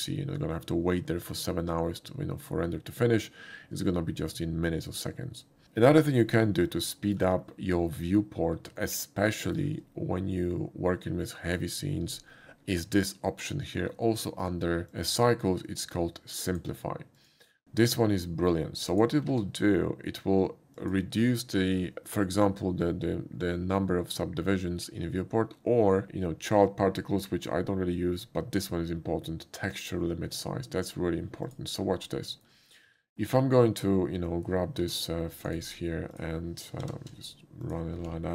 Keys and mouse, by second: 6.7-7.2 shift+middle drag, 8.8 shift+middle click, 16.4 click, 17.2 click, 18.9 click, 20.8 click, 20.8 shift+a, 31.4 click, 32.3 shift+middle click, 32.9 Tab, 35.3 click, 35.4 right click, 36.1 click, 36.8 g, 37.1 z, 37.6 click, 38.1 ctrl+b.